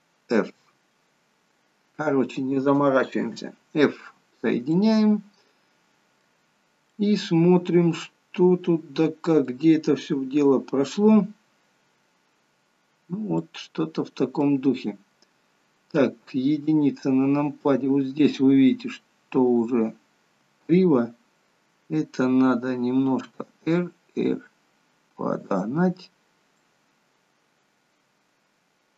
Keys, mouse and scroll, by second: 0.8 f, 1.8-2.2 scroll down 1, 4.9 middle click, 6.7 scroll up 1, 7.0 middle click, 10.4-12.0 scroll up 2, 12.0-13.2 scroll down 1, 13.6 middle click, 14.6 scroll down 3, 16.1 KP_1, 18.0-18.4 scroll up 5, 19.6 click, 23.5 r, 26.3-26.9 scroll down 2, 26.7 middle click.